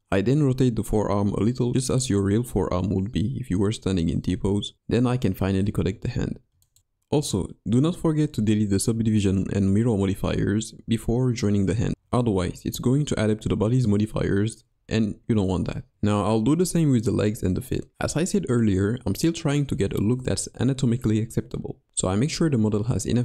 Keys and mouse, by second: 2.2 2, 2.9 s, 5.4 ctrl+e, 7.1-8.0 middle drag, 8.1 middle click, 9.1 middle click, 9.9-12.3 middle drag, 13.0-13.5 middle drag, 15.8 Tab, 16.6 g, 17.9-18.4 middle drag, 19.1 s.